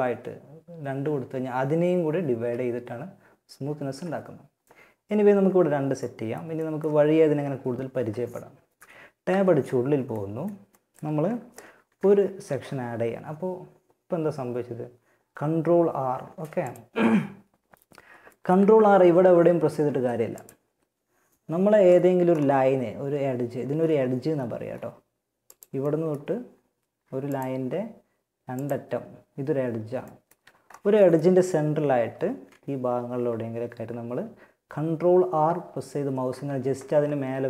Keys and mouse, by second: 1.5 z, 5.2 middle click, 8.4 Tab, 11.1 ctrl+r, 17.4-19.5 middle drag, 18.0 ctrl+r, 19.7-21.2 middle drag, 21.2-29.6 right drag, 25.2-28.2 middle drag, 29.2 middle click, 29.6 a, 31.2 ctrl+r.